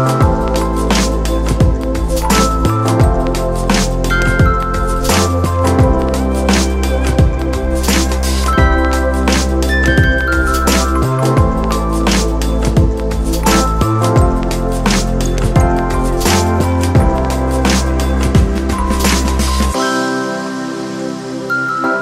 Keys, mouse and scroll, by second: 3.8 ctrl+0.